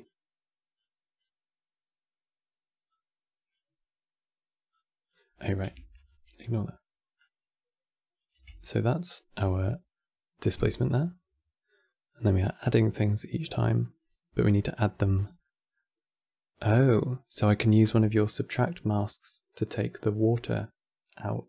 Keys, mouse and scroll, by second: 4.4 click, 5.0 middle click, 5.6 ctrl+right click, 6.1 middle click, 6.9-9.3 drag, 9.3-10.5 middle drag, 10.5 ctrl+shift+click, 13.5-14.9 middle drag, 14.9 scroll down 4, 15.1-18.2 middle drag.